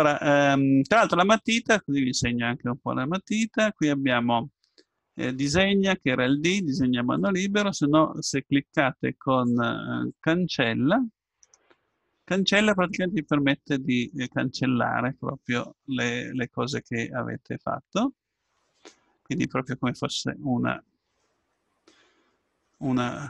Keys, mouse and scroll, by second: 3.3-5.2 drag, 11.4-16.1 drag.